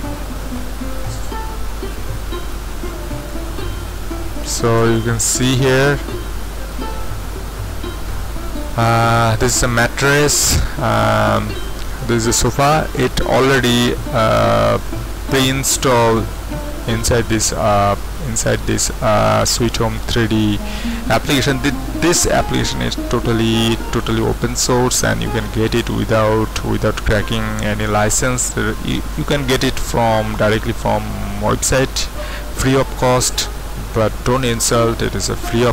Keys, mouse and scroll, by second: 0.8-1.5 typing, 1.2-3.3 middle drag, 3.3-7.7 drag, 5.7-7.7 scroll up 1, 8.0-8.8 scroll up 1, 9.0-10.4 drag, 14.8-16.5 drag.